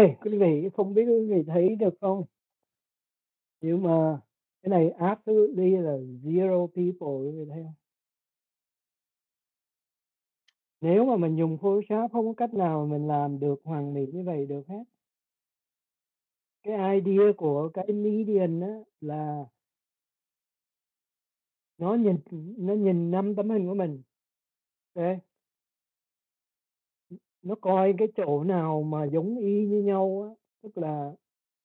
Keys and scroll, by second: 4.1 ctrl+0.